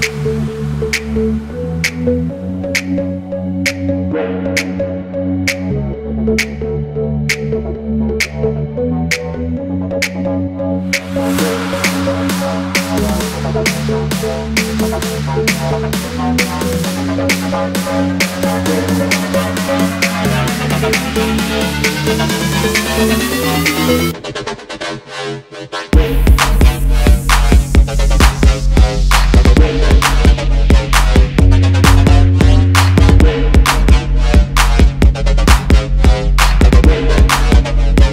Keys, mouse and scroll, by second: 1.1 alt+scroll down 1, 1.5 alt+scroll up 1, 2.1 alt+scroll up 1, 3.8 double click, 6.0 alt+scroll down 1, 6.5 v, 7.1 v, 7.3 alt+scroll down 1, 7.6 shift+click, 8.2 alt+scroll down 2, 9.2 double click, 9.5 alt+scroll down 1, 10.0 alt+scroll down 1, 10.5 double click, 11.7-12.2 alt+scroll up 1, 12.5 x, 13.5 alt+scroll up 1, 20.3 double click, 21.4 alt+scroll down 1, 22.2-22.6 alt+scroll up 2, 27.5 alt+scroll down 1, 28.1 space, 29.0 alt+scroll up 1, 30.3 alt+scroll down 1, 30.9 space, 31.4 alt+scroll up 1, 32.3 alt+scroll down 1, 33.0 space, 35.9 double click, 37.6 ctrl+x, 37.7 ctrl+f.